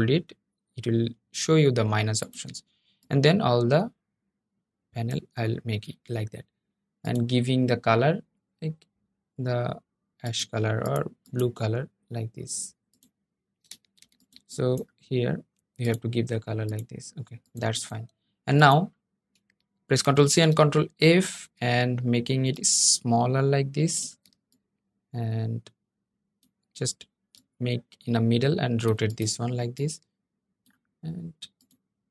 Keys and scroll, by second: 19.7 super+c, 20.0 super+f.